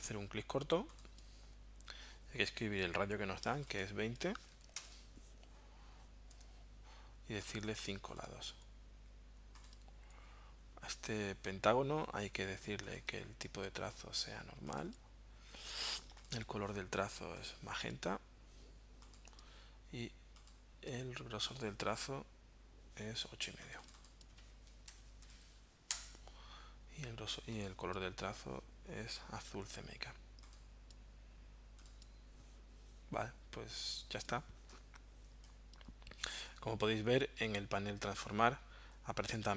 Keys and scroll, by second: 4.3-5.2 typing, 6.3 Tab, 24.7-25.9 typing, 34.7 space.